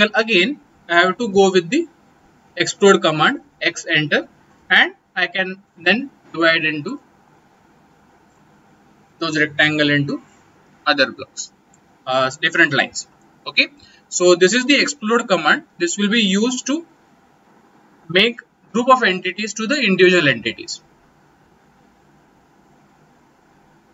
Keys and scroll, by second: 1.1 x, 1.3 space.